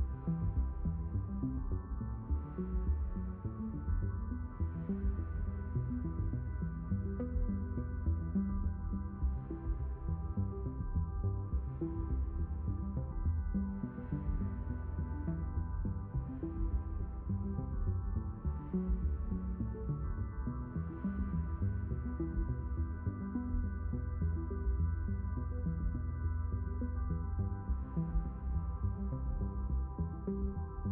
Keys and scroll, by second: 24.2 ctrl+4, 27.9 ctrl+4.